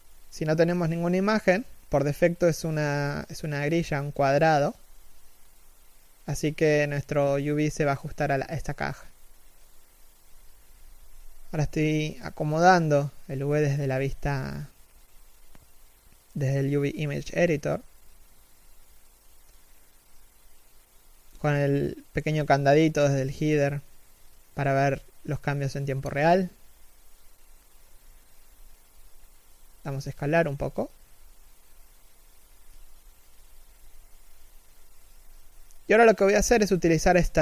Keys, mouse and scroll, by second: 21.8 scroll up 1, 22.7 shift+middle click, 27.4 scroll down 1.